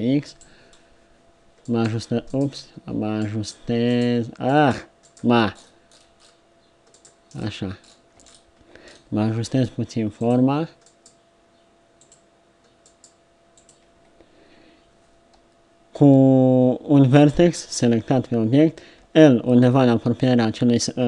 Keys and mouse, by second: 1.7 click, 7.3-8.8 middle drag, 9.5 g, 10.9 click, 12.9 click, 19.0 l.